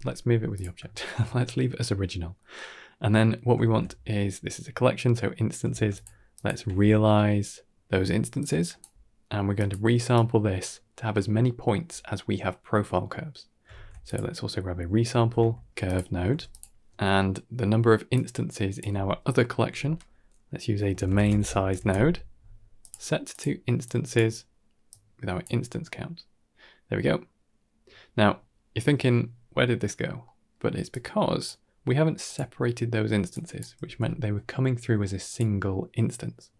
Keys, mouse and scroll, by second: 0.8 shift+middle drag, 2.3 middle click, 3.1 middle click, 3.5 shift+a, 5.5 shift+a, 8.4 g, 10.0 click, 12.9 middle click, 13.6 shift+a, 16.1 g, 18.0-22.7 drag, 23.2-24.0 drag, 24.7-25.3 drag, 30.1 middle click, 30.8 click, 32.1 click, 33.2 drag, 33.7 g.